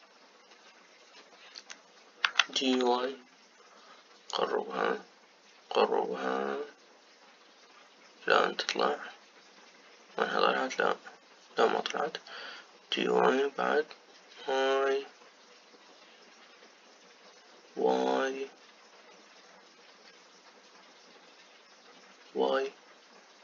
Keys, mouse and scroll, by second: 0.8 scroll up 1, 3.5 g.